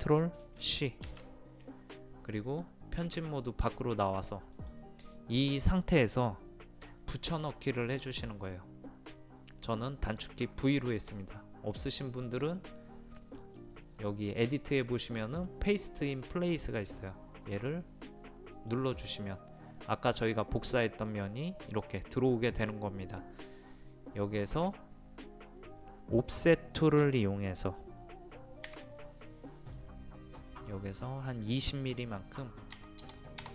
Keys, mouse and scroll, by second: 1.0 ctrl+c, 2.4 click, 13.4 click, 28.6-30.7 drag, 32.7 KP_2, 33.0 KP_0.